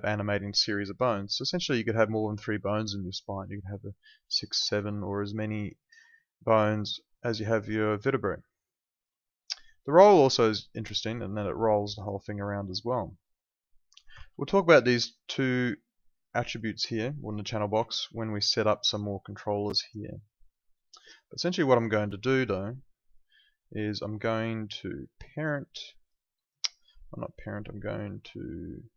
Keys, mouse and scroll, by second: 1.2 alt+click, 4.1 alt+click, 4.6 alt+middle click, 7.3 alt+click, 10.0 click, 10.4 alt+click, 10.6 alt+middle click, 14.2 z, 15.5 click, 17.9 alt+middle click, 18.1 alt+right click, 18.3 alt+click, 19.3 alt+click, 19.6 alt+right click, 19.9 alt+middle click, 20.1 alt+right click, 20.3 alt+click, 22.1 alt+click, 24.0 alt+middle click, 25.6 click.